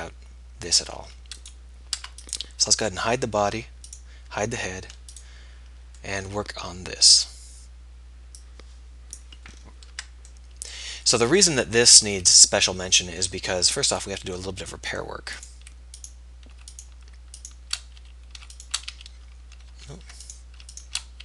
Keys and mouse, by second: 2.2 Tab, 4.0 h, 5.1 h, 7.1-8.2 middle drag, 10.2 Tab, 14.1-18.4 middle drag, 18.4 f, 19.2 f, 20.0 ctrl+z.